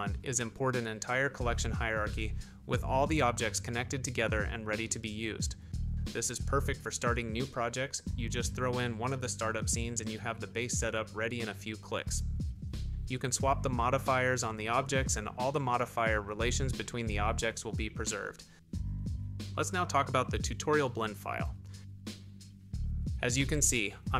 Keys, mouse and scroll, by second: 1.3 shift+middle click, 1.9 click, 5.3 click, 5.4 middle click, 5.8-7.0 typing, 6.0 Tab, 7.4 click, 7.6 Tab, 7.8 click, 8.8 Tab, 8.9 click, 9.0-9.8 typing, 9.1 shift+middle click, 9.4 click, 10.1 Tab, 10.4 shift+middle click, 10.9 shift+middle click, 10.9-11.9 typing, 11.2 Tab, 11.7 Tab, 11.9 middle click, 12.3 shift+middle click, 12.9 click, 14.0 click, 14.7-16.1 drag, 17.4 middle click, 17.7 middle click, 18.1 g, 19.6 click, 19.7-20.2 shift+middle drag.